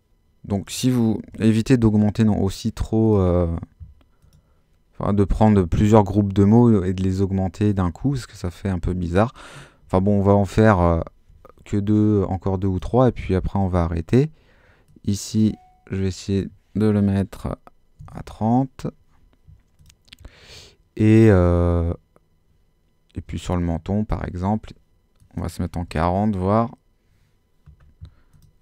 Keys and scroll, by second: 1.0-1.8 typing, 9.8 super+-, 17.7-18.5 typing, 25.6-26.4 typing.